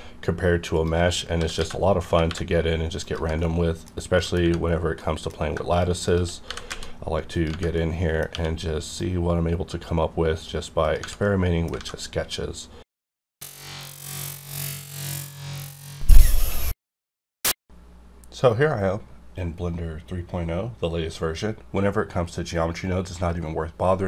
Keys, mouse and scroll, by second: 0.7 click, 1.1 scroll down 1, 1.4 s, 1.6 x, 2.1 y, 3.0 click, 3.4 middle click, 4.3-4.8 scroll down 2, 5.0 middle click, 5.7 shift+click, 6.4 g, 6.7 z, 7.4 click, 7.5 Tab, 7.7 middle click, 8.3 q, 8.9 click, 11.2 middle click, 11.8 alt+a, 12.3 click.